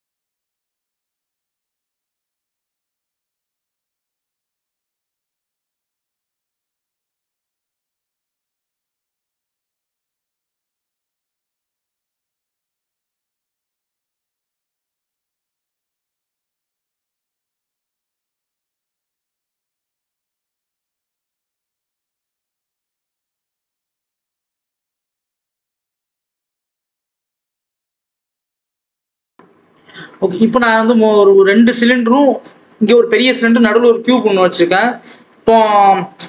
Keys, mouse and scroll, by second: 0.0 alt+a, 1.0 shift+a, 2.4 Tab, 2.8 r, 3.6 s, 4.3 ctrl+z, 4.6 KP_7, 4.9 scroll down 1, 5.6 click, 5.7 scroll up 1, 5.9 scroll down 2, 6.2-6.8 scroll up 1, 6.8 click, 7.0-7.8 scroll up 1, 7.8 click, 8.4 ctrl+z, 8.5 Tab, 8.8 click, 9.6 scroll down 2, 9.7 ctrl+z, 9.9 scroll up 1, 10.8 scroll up 2, 11.5 click, 12.3 Tab, 12.5 s, 15.0 KP_1, 15.2 KP_3, 15.5-16.0 scroll up 1, 16.0 s, 17.4 Tab, 17.7 g, 18.5 g, 19.4 shift+d, 20.6-21.0 scroll down 2, 21.0 Left, 21.5 Left, 21.7 shift+d, 22.4 g, 22.9 Tab, 23.0 s, 24.3 Tab, 24.6 alt+a, 24.7 scroll down 1, 25.2 Left, 26.8-27.3 scroll up 2, 27.1 click, 27.4 scroll down 1, 27.9-29.9 scroll up 1, 31.8 click, 32.2 click, 33.4 click, 34.8 scroll down 2, 35.1-36.2 scroll up 1.